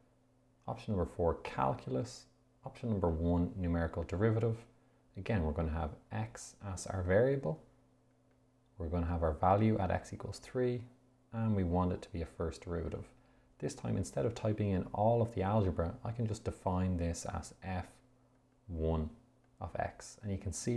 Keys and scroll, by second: 1.9 4, 4.2 1, 6.6 x, 8.6 Down, 10.3 3, 13.1 Return, 17.9 f, 18.9 1, 20.0 (.